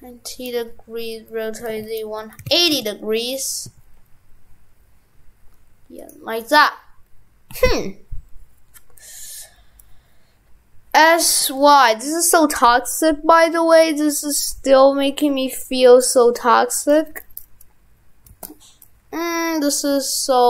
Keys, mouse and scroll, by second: 6.6 right click.